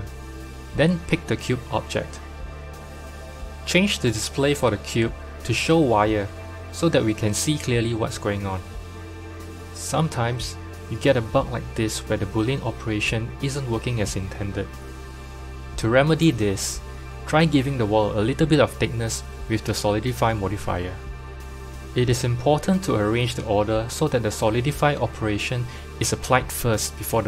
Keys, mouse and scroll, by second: 4.2 click, 6.0 click, 7.1-11.7 drag, 11.8 g, 13.3 click, 18.3 click, 19.1-22.2 drag, 23.3 click, 24.9 click.